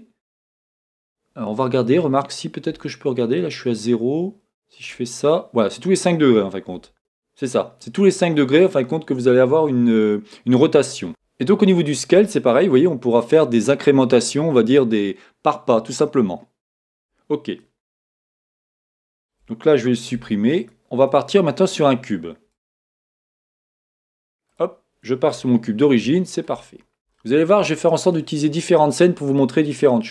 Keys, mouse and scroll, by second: 2.7 r, 4.9 click, 6.8 r, 7.0 click, 11.1 s, 17.1 Escape, 17.8 scroll down 2, 19.0-20.1 shift+middle drag, 20.1 x, 21.3 middle click, 21.9-30.1 middle drag, 22.2-22.8 scroll up 1, 22.8 shift+a, 26.7 scroll up 1, 27.7 scroll up 1.